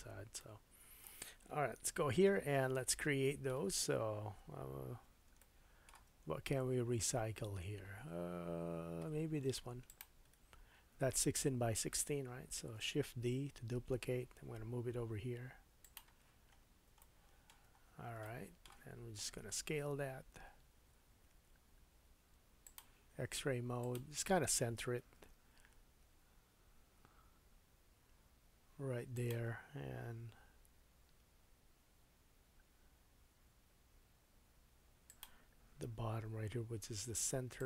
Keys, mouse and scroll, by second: 1.8 KP_1, 2.8 shift+scroll up 1, 6.3-8.5 scroll down 2, 9.9 shift+super+click, 12.5 shift+super+d, 12.8-16.6 shift+super+drag, 16.6-23.8 shift+middle drag, 16.6-17.0 scroll up 3, 17.8-18.2 scroll up 3, 19.4 s, 23.8-29.3 drag, 25.2 g, 29.3-37.6 middle drag, 30.1 s, 35.8 g.